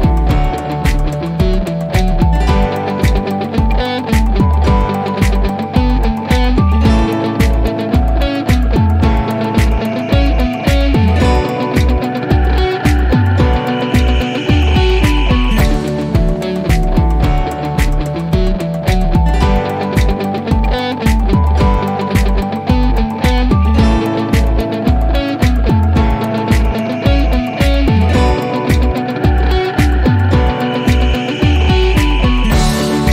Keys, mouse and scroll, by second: 7.0 click, 18.0 click, 22.2 click, 24.5 F3, 26.0 click, 30.8-31.3 click, 31.9 5.